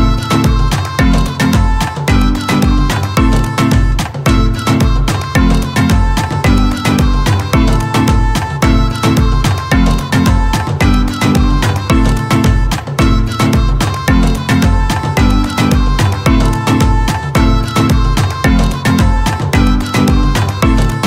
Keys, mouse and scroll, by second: 0.7 click, 4.8-8.8 drag, 11.7 click.